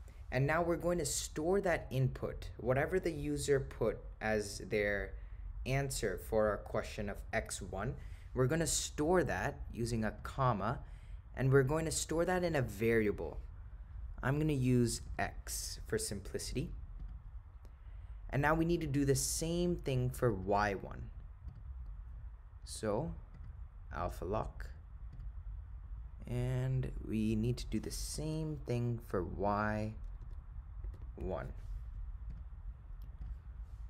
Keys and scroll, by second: 10.2 ,, 17.1 Return, 20.4 Right, 21.5 Return, 28.3 1, 29.5 0, 30.3 7, 32.4 ., 33.3 0.